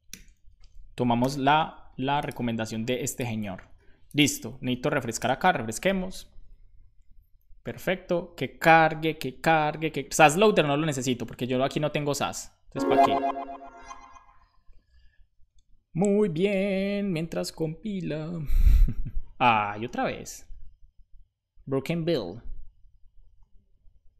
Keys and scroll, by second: 0.2 super+s, 1.4 super+s, 5.1 Return.